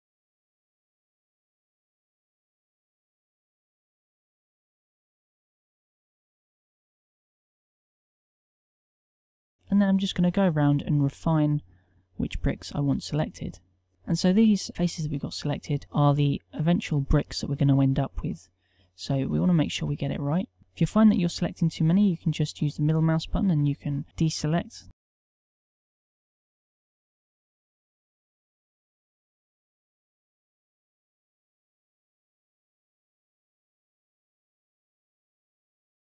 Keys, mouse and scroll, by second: 13.9 n, 13.9 c.